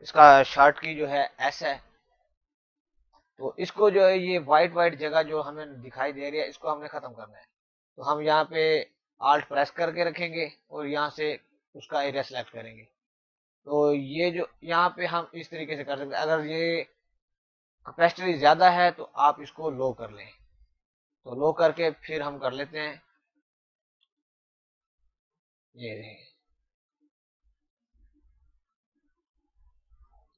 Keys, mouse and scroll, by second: 6.1 alt+Num_Lock, 10.5 click, 13.9 click, 18.1 click, 21.8 click, 23.7 alt+click, 27.1 click, 27.6 click, 29.9 click.